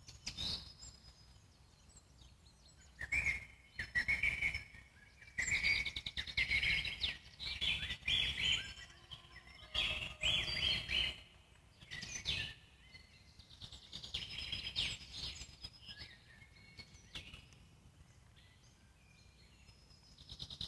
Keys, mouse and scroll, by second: 1.9 shift+f, 4.3 f, 5.6-7.6 scroll up 2, 7.6 f, 8.7-10.6 ctrl+drag, 10.6 alt+middle click, 11.2 scroll down 1, 11.4 middle click, 12.1 f, 13.0 ctrl+click, 13.7 alt+middle click, 14.2-15.3 ctrl+drag, 15.3 alt+middle click, 16.0 ctrl+click, 16.9 alt+middle click, 17.8 ctrl+click, 18.6-19.6 alt+middle drag, 19.6 ctrl+click, 20.5 alt+middle click.